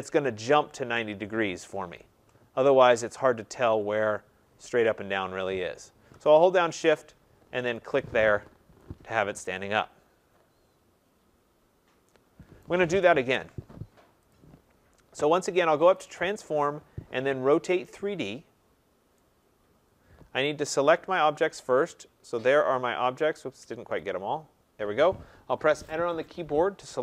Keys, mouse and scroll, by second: 7.7 shift+click, 12.6 right click, 13.4 ctrl+z, 14.3 click, 15.9 click, 17.8 click, 18.6 middle click, 19.0 middle click, 20.4 right click, 22.4 click, 23.9 click, 26.2 Return.